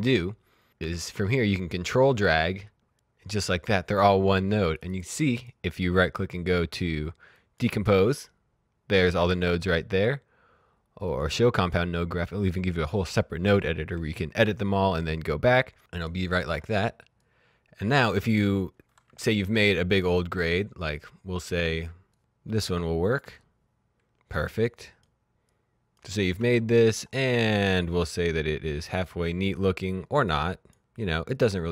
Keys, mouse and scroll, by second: 0.3 click, 1.3 ctrl+click, 4.6 click, 5.3 right click, 7.2 click, 9.1 ctrl+Num_Lock, 9.2 ctrl+z, 9.8 right click, 11.3 click, 15.0 click, 15.9 right click, 16.4 click, 21.5 click, 27.2 middle click, 27.9 click.